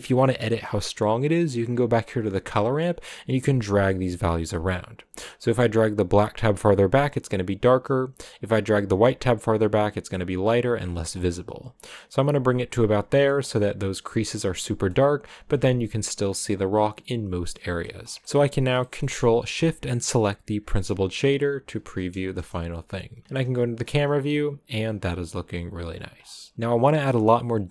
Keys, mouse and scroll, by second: 0.0-1.3 middle drag, 1.3-7.0 drag, 8.1-11.5 drag, 11.7-12.7 drag, 12.7 scroll down 3, 13.0 middle click, 13.3-14.5 scroll up 4, 14.5 scroll down 4, 14.5 middle click, 15.3 scroll down 1, 15.4-17.5 middle drag, 17.5-18.1 scroll up 5, 17.8 middle click, 18.2 scroll down 3, 20.6 ctrl+shift+click, 22.3 KP_0, 23.2 shift+middle click, 23.4-23.8 scroll up 6, 25.8 scroll down 2, 26.4 scroll down 5, 27.3-27.7 middle drag.